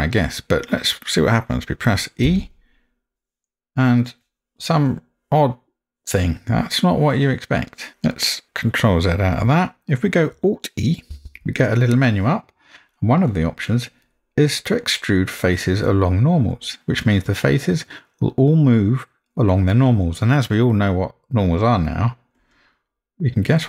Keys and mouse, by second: 2.3 e, 9.3 ctrl+z, 9.7 a, 11.1 alt+e.